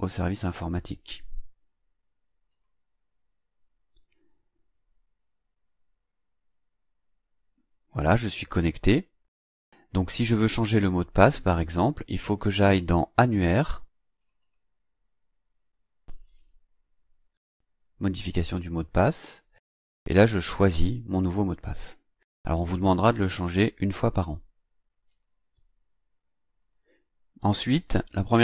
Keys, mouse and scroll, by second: 2.4 click, 8.6-10.1 drag, 14.2 click, 16.1 click, 18.2 click, 25.1 click, 26.6 click.